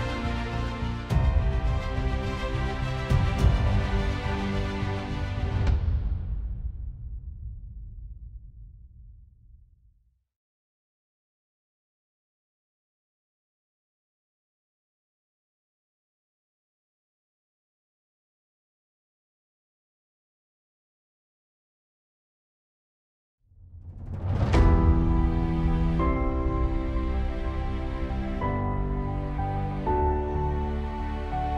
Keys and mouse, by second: 29.2 middle click.